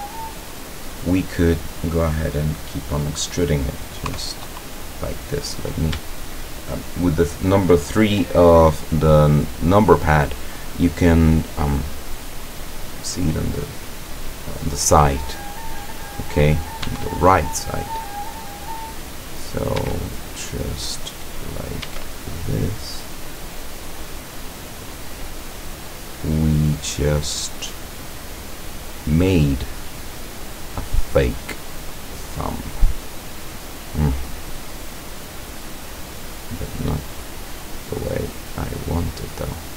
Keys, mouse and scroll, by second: 4.1 KP_3, 16.8 e, 19.6 click, 19.8 e, 21.6 click, 21.8 e, 24.8 click, 25.2 middle click, 25.3-27.6 drag, 27.7-28.5 scroll up 1, 28.5-31.4 middle drag, 31.5 scroll down 1, 32.0-32.6 middle drag, 32.8 middle click, 33.5-35.9 drag, 36.3 right click, 37.3-39.6 drag.